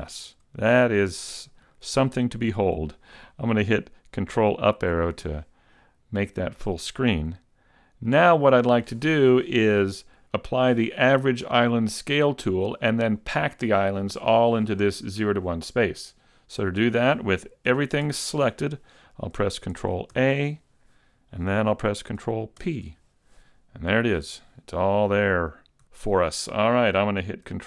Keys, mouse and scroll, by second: 0.6 shift+middle click.